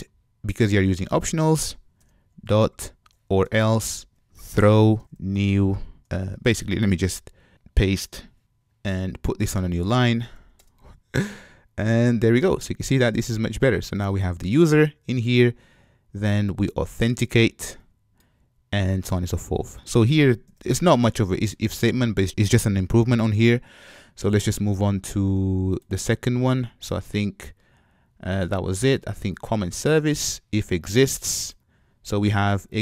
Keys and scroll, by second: 3.5 Return, 8.4 shift+super+Return, 11.7 shift+super+Return.